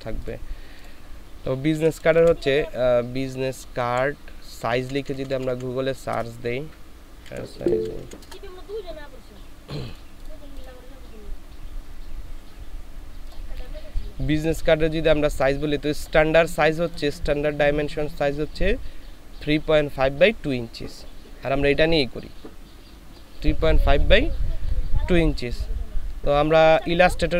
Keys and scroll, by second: 1.7 b, 2.1 u, 2.1 s, 3.8 Right, 4.6 BackSpace, 4.8 BackSpace, 4.9 BackSpace, 7.2 s, 7.6 i, 7.7 z, 8.0 e, 8.2 Return, 9.2-10.8 typing.